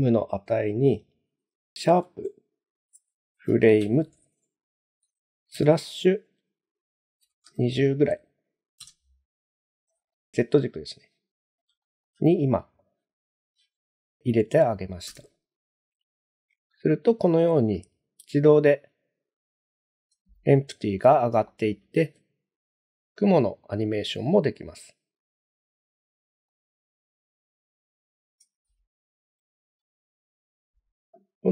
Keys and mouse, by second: 0.8-10.0 drag, 11.8 shift+middle drag, 12.6 middle drag, 15.1 space, 19.9 space, 21.5 shift+middle drag, 22.0 space, 23.7-26.5 middle drag, 28.3 space.